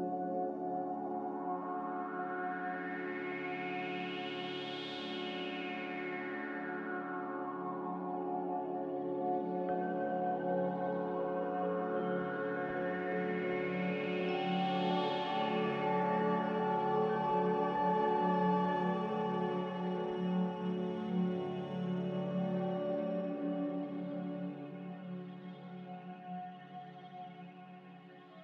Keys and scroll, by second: 5.5 s, 11.4 typing, 13.6 Tab, 13.7-15.0 typing, 18.0 a.